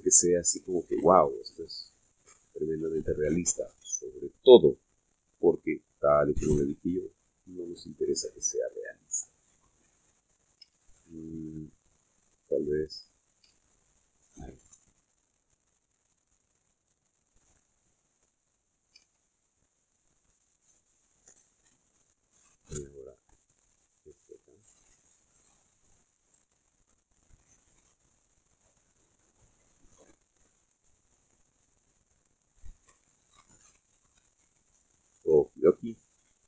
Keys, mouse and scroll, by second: 0.3 click, 1.4 click, 2.6 click, 6.9 click, 8.0-11.9 drag, 11.9 ctrl+z, 13.0-14.6 drag, 14.7 ctrl+z, 15.1 ctrl+click, 15.8 click, 16.6 click, 17.3 click, 18.0 click, 19.0 click, 19.5 click, 20.1 ctrl+z, 20.5 ctrl+click, 22.4-22.8 middle drag, 22.9 middle click, 25.0 click, 25.8 click, 26.6 click, 27.3 click, 28.0 click, 28.6 click, 29.1 click, 29.6 click, 30.0 click, 30.8 click, 31.2 click, 31.7 click, 32.1-33.5 middle drag, 34.5-35.6 scroll down 4.